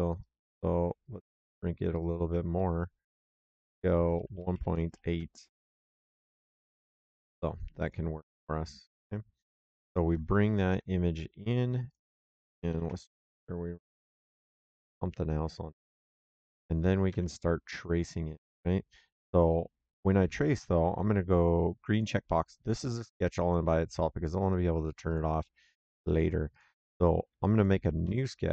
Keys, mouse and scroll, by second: 0.1 click, 2.4 middle click, 3.2 click, 4.3 KP_1, 4.8 KP_8, 5.0 KP_Enter, 6.2 Escape, 6.7 click, 8.9 right click, 10.6 alt+Tab, 11.8 alt+click, 12.6 ctrl+Page_Up, 16.0 alt+Tab, 17.0 alt+Tab, 18.4 alt+Tab, 21.8 click, 24.3 click, 27.4 click, 27.9 s.